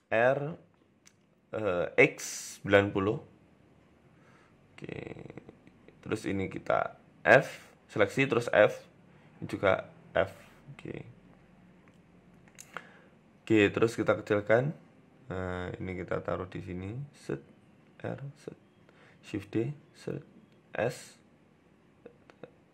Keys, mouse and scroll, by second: 0.0 Tab, 0.9 Tab, 1.5 r, 4.0 Tab, 4.5-5.8 scroll down 4, 4.7 middle click, 6.4 KP_3, 6.9 click, 8.0 f, 8.3 click, 9.5 f, 9.7 middle click, 10.4 KP_1, 10.7 scroll up 2, 11.0 scroll down 2, 11.3 scroll down 1, 12.4 scroll down 1, 12.7-13.0 scroll up 2, 13.0 scroll down 2, 13.1 Tab, 13.4 s, 14.3-14.6 scroll up 2, 14.4 Tab, 14.6 shift+middle click, 15.0 click, 15.7 g, 16.3 g, 17.7 r, 18.6 shift+middle click, 18.9 shift+d, 19.8 r, 20.8 g, 22.1 r.